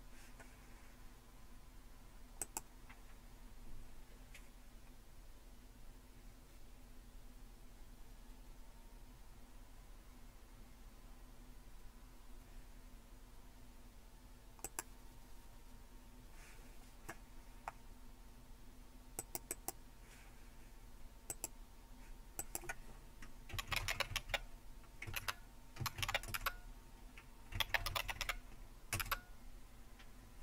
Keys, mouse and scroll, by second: 2.4 click, 14.7 click, 19.2-20.7 drag, 21.3 click, 22.4 click, 23.3-28.7 typing, 28.9 Return.